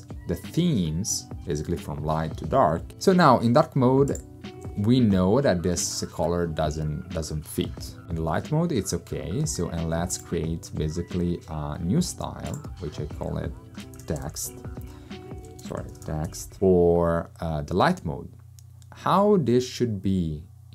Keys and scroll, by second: 13.7-16.9 typing, 15.5 super+a.